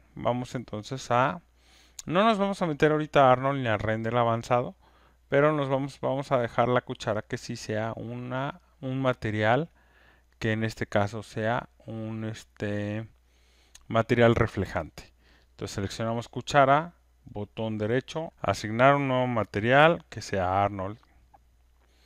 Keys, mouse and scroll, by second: 3.5-8.5 drag, 15.8 click, 18.3 click, 19.4 right click, 21.2 click.